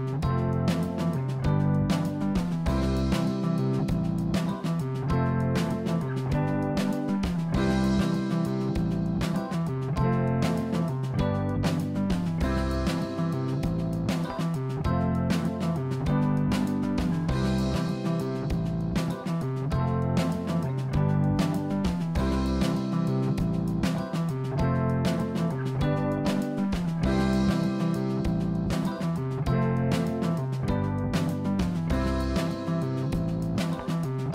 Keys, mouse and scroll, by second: 2.5 click, 2.9-4.6 middle drag, 7.3 KP_1, 9.7 click, 10.6 r, 23.7 click, 24.1 scroll down 3, 24.5-25.1 scroll up 2, 25.5-26.2 scroll down 3, 26.7 click, 28.4 shift+d, 34.0 r.